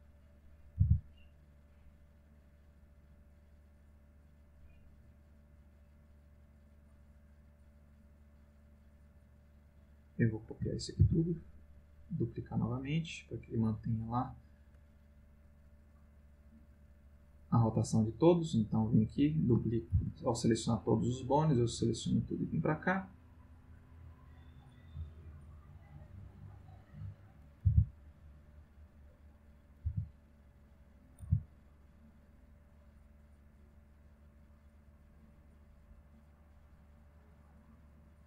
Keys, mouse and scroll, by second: 0.1 click, 0.6 click, 0.8 r, 2.4 click, 3.3-9.4 drag, 10.0 click, 11.0 shift+d, 12.9 click, 13.5 click, 17.1-17.9 drag, 19.1 click, 19.9 shift+d, 21.5 click, 22.1-26.4 drag, 27.3 click, 27.6 r, 29.1 click, 29.5 click, 29.9 r, 30.5 click, 31.0 click, 31.2 r, 31.8 click, 32.6-38.2 drag.